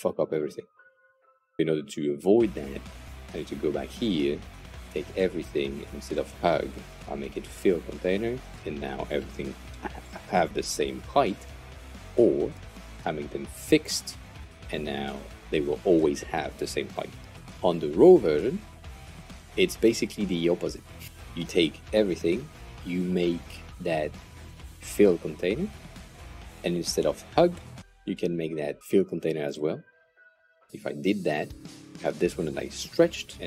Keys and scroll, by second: 4.5 Return, 12.7 super+z, 21.3 Return.